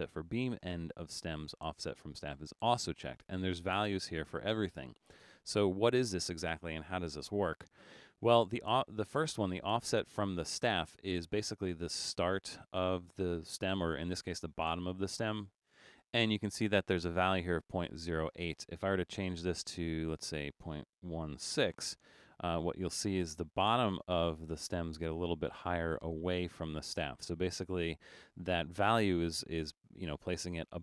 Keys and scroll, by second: 21.0-22.0 typing.